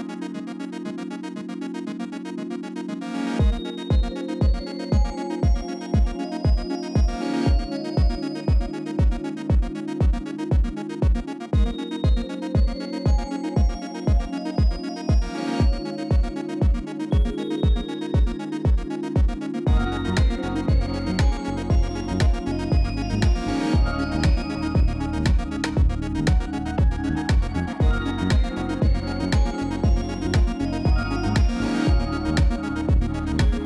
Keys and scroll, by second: 3.0 a, 3.7 u, 7.7 r, 8.1 z, 18.5 s, 24.7 g.